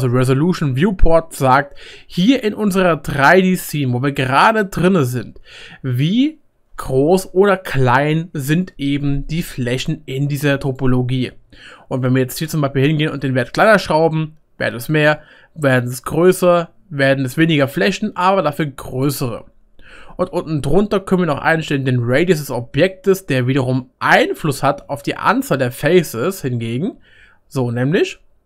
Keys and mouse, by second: 10.8-12.1 drag, 17.4 click, 17.4-20.1 middle drag, 17.4 right click, 22.9 click, 22.9-24.2 middle drag, 22.9 right click, 24.5-28.4 middle drag, 24.5 click, 24.5 right click, 25.4 click, 25.4 right click.